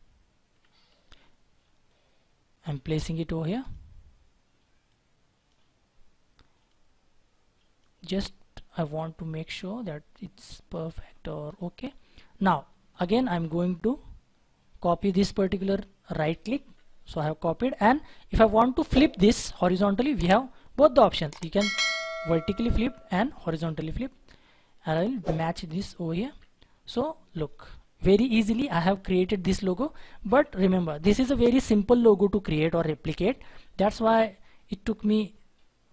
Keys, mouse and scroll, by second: 3.2-3.6 scroll up 1, 11.0 scroll down 1, 12.6-13.5 scroll up 1, 13.5 scroll up 1, 16.1 ctrl+right click, 22.8 ctrl+z, 24.1-24.7 scroll up 1, 26.4-28.0 ctrl+drag, 26.6 scroll down 1, 28.0-28.5 scroll up 1, 34.8-35.2 scroll down 1, 35.2-35.9 scroll up 1.